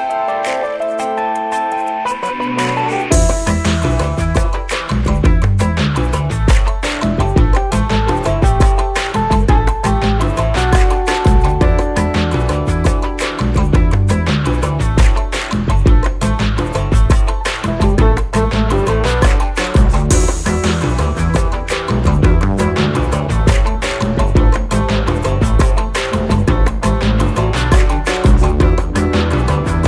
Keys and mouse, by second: 0.3 click, 1.5-4.6 alt+drag, 8.8-11.2 drag, 12.4-13.7 typing, 13.2 click, 14.9-15.6 typing, 15.1 click, 17.7-19.1 drag, 22.9 click, 28.0 click.